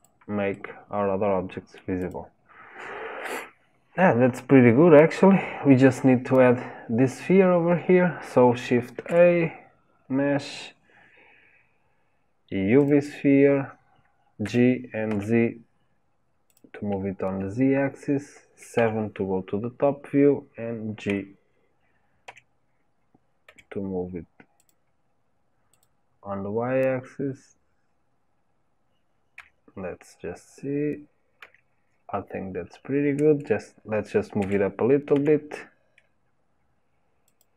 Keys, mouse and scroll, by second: 0.5-2.0 middle drag, 2.0 click, 2.5 scroll down 2, 4.6-5.8 scroll up 2, 8.9 shift+a, 14.4 g, 18.7 KP_7, 21.1 g, 25.7 click, 27.0-27.5 scroll up 3, 29.3 KP_3, 31.4 KP_1, 34.4 g.